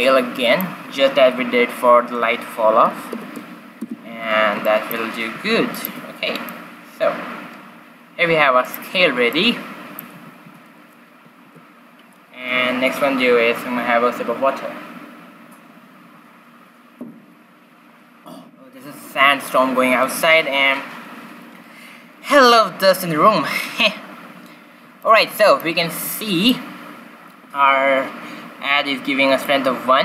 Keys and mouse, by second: 1.2 r, 4.6-6.3 middle drag, 5.3 z, 6.3-8.0 drag, 6.8 g, 9.2 middle click, 10.1 a, 10.4 z, 11.7 shift+z, 23.1 q, 23.6 q, 24.4-27.9 middle drag, 29.4-30.0 drag.